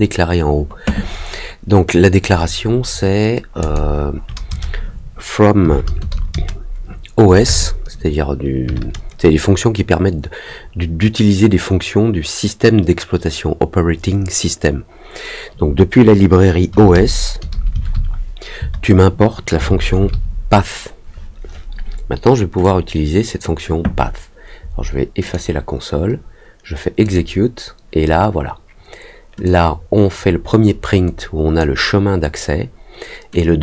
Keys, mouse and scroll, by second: 3.5 click, 22.6 click, 25.2 click, 27.0 click, 29.4-31.5 drag, 33.3 click.